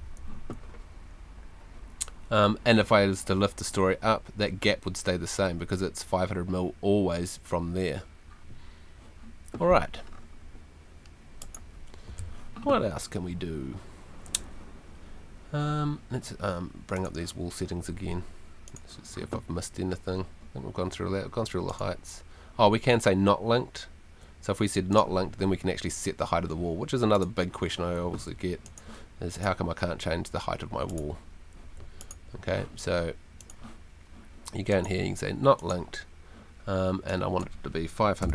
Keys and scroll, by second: 28.0 Home, 31.6 Home, 38.0-38.3 typing.